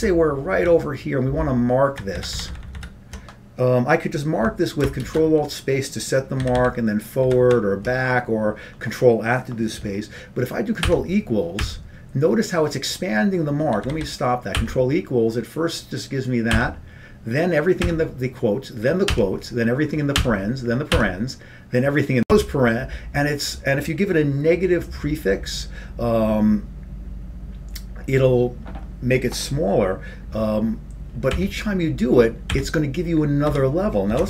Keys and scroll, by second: 0.5 ctrl+n, 1.3 ctrl+b, 4.4 ctrl+b, 5.4 ctrl+shift+space, 6.5 ctrl+f, 10.0 ctrl+b, 10.0 ctrl+f, 11.3 ctrl+=, 12.3 ctrl+=, 15.3 ctrl+=, 15.3 ctrl+g, 17.6 ctrl+=, 21.4 ctrl+=, 31.5 ctrl+=.